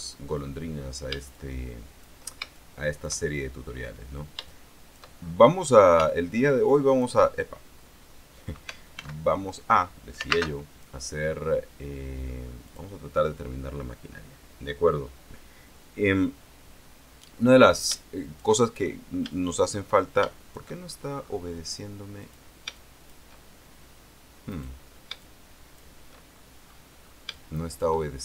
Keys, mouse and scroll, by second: 0.4-1.2 shift+scroll up 5, 1.5 shift+click, 2.7 shift+click, 4.2-4.6 scroll down 2, 4.6 shift+click, 5.6 scroll up 2, 6.2-7.4 alt+drag, 9.1 alt+x, 10.6 alt+space, 12.8 click, 18.1 shift+click, 18.7-19.2 shift+scroll down 1, 19.5 shift+click, 20.4 shift+click, 21.0-21.4 shift+scroll down 1, 21.4 scroll up 1, 22.4 click, 22.9 shift+click, 24.6 right click, 25.4 shift+click, 26.5 shift+scroll down 1, 27.4 shift+scroll up 1, 27.5 shift+click.